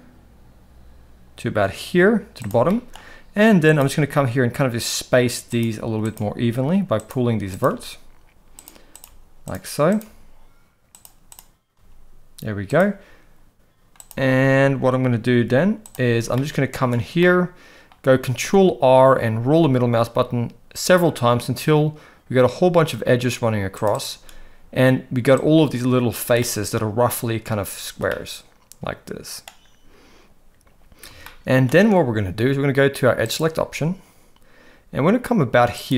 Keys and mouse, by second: 2.8 shift+middle click, 3.7 click, 4.0 g, 6.0 click, 6.2 g, 7.6 click, 7.7 g, 8.9 click, 9.0 g, 9.9 click, 10.0 g, 11.7 g, 14.0 click, 15.2 g, 16.3 shift+middle click, 17.1 middle click, 18.4 ctrl+r, 25.4 click, 26.4-27.5 middle drag, 28.1-29.4 middle drag, 31.2 shift+middle click, 33.3 click, 35.8 click.